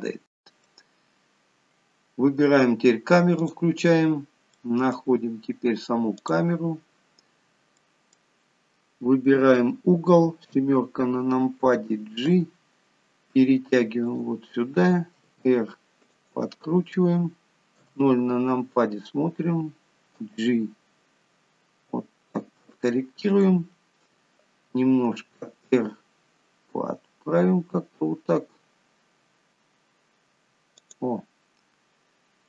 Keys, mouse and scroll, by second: 0.1 middle click, 3.7 click, 4.3-4.7 scroll down 4, 4.7 middle click, 6.4 click, 7.1 scroll down 2, 8.0 middle click, 10.8 KP_7, 12.4 g, 15.6 r, 18.0 KP_0, 20.4 g, 25.0 r.